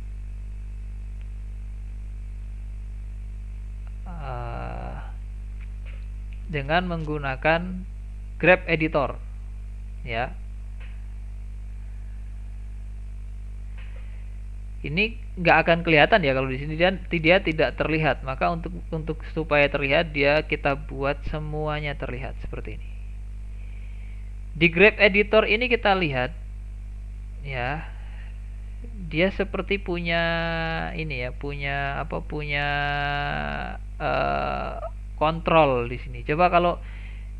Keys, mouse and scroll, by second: 1.6-2.0 scroll down 2, 2.0-3.5 middle drag, 3.5 click, 4.7-5.5 scroll up 6, 5.5-8.0 middle drag, 8.0 click, 11.7-13.6 drag, 21.2 click, 25.8 click, 27.4 click, 28.5 click, 30.2-33.2 drag.